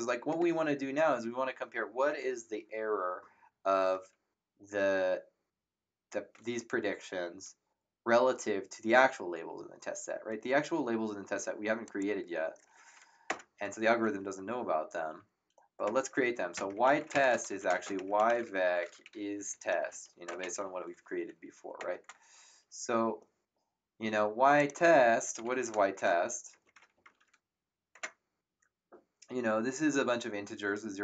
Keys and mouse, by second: 11.8 click, 13.2 Return, 13.2 KP_Enter, 15.8-21.0 typing, 21.8 Return, 21.8 Num_Lock, 24.5 click, 25.1-27.5 typing, 27.9 Return, 27.9 KP_Enter.